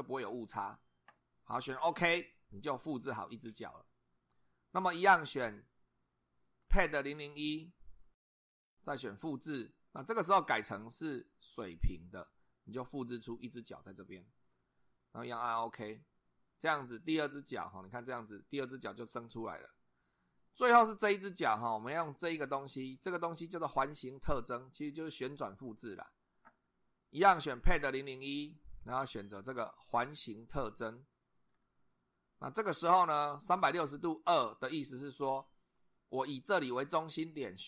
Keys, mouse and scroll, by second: 1.9 click, 6.7 click, 9.3 click, 10.9 click, 11.9 click, 15.6 click, 17.4 click, 19.4 click, 27.6 click, 31.5 click.